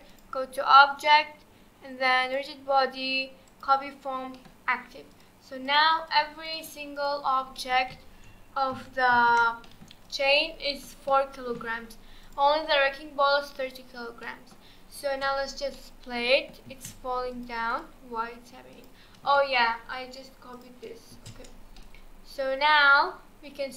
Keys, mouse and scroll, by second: 0.1-3.3 drag, 4.4-5.1 middle drag, 5.1 click, 5.6 click, 6.1 click, 6.4 click, 7.0 click, 7.3 scroll down 2, 7.6-9.1 middle drag, 9.1 alt+h, 9.6-10.0 middle drag, 10.0 click, 10.4-11.7 middle drag, 11.7 scroll up 1, 12.2 click, 14.2-14.6 middle drag, 14.6-15.1 scroll down 2, 15.1 space, 15.7-16.7 middle drag, 16.7 space, 17.3-18.9 drag, 20.5 click, 21.1 space, 21.8-23.7 middle drag.